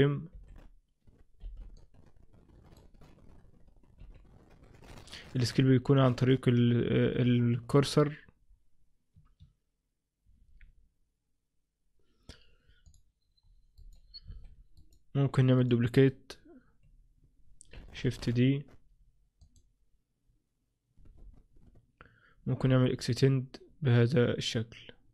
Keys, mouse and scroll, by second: 13.0 click, 13.8 right click, 14.8 right click, 15.7 right click, 16.0 right click, 18.1 shift+d.